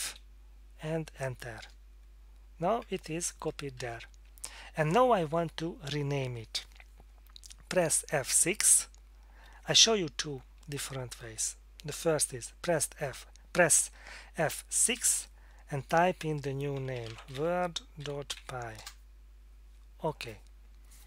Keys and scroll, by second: 0.1 F5, 1.6 Return, 3.0 Tab, 3.8 Down, 14.9 F6, 16.5-18.9 typing.